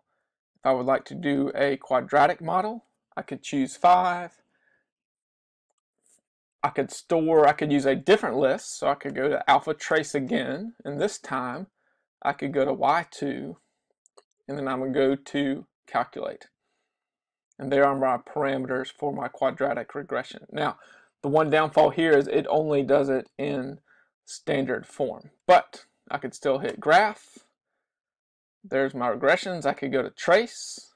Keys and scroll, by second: 0.3 Down, 0.5 Down, 0.7 Down, 1.1 Down, 4.0 Return, 5.1 Down, 5.5 Down, 5.9 Down, 11.3 Down, 12.6 Return, 13.5 Down, 16.1 Return.